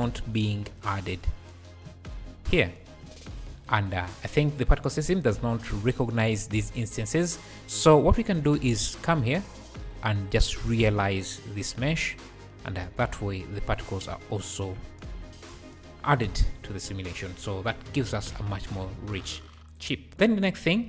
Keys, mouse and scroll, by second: 0.8 shift+right click, 1.2-3.1 typing, 3.4 scroll up 1, 4.1 scroll up 1, 5.4 click, 6.1 scroll up 3, 7.3 scroll up 3, 8.0-8.3 drag, 8.7 click, 9.1 shift+a, 11.7 shift+a, 12.8 alt+a, 13.0-13.3 scroll down 3, 14.4 shift+right click, 14.8 space, 15.5 space, 17.6 `, 18.4 `, 19.7 click, 20.1 scroll down 7, 20.2 scroll up 2.